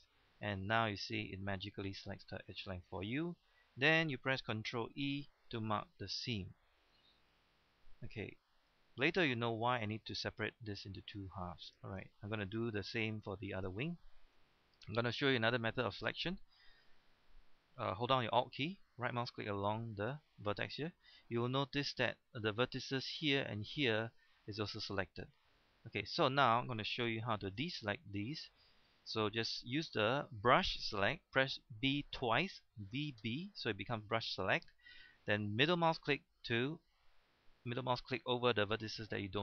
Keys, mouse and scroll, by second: 0.3 middle click, 1.0-1.3 scroll up 1, 1.3 middle click, 1.8 scroll down 1, 2.0 middle click, 4.9 ctrl+e, 5.4 click, 6.1 middle click, 7.1 scroll down 1, 7.3-9.1 middle drag, 11.5-12.0 scroll down 1, 12.0 shift+middle click, 12.6 scroll up 1, 13.3-13.6 scroll up 1, 16.9-18.3 scroll up 1, 19.9 alt+right click, 20.6-20.9 scroll down 1, 20.9 middle click, 21.7-22.5 scroll up 1, 25.5-27.0 middle drag, 27.2 shift+middle click, 27.8-29.0 middle drag, 32.9 b, 33.2 b, 35.9-38.1 middle drag.